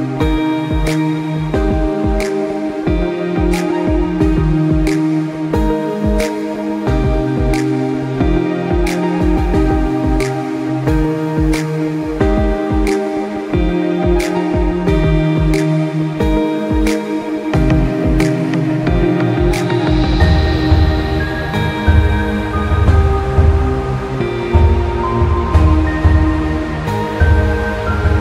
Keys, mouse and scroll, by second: 0.3 scroll up 1, 0.8 click, 1.2 click, 3.9 click, 4.2 scroll up 1, 4.4 click, 4.5-5.0 scroll down 2, 4.6 click, 5.0 click, 5.7 alt+scroll down 1, 5.8 space, 6.1-6.8 scroll up 3, 6.2 click, 6.6 click, 7.1 click, 7.4 click, 7.9 space, 8.2 click, 9.4-12.2 typing, 9.6 click, 10.5 click, 10.8 click, 11.8-12.2 scroll down 3, 12.3 alt+scroll up 2, 12.6 click, 16.8 click, 17.5 ctrl+z, 18.0 scroll down 1, 18.1 click, 18.3 scroll up 1, 18.5 click, 19.3 ctrl+z, 19.5 click, 19.6 scroll up 1, 19.7 click, 20.5 scroll down 1, 20.6 scroll up 1, 20.8 click, 21.2 alt+scroll down 1, 21.4 click, 22.0 space, 22.1 click, 27.7 scroll down 1, 27.8 click.